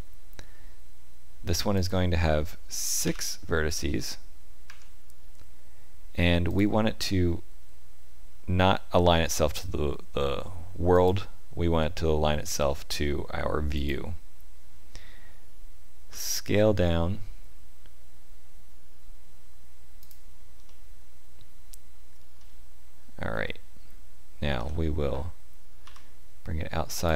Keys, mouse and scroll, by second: 1.7 click, 10.9 click, 16.1 s, 20.7 middle click, 24.5 g.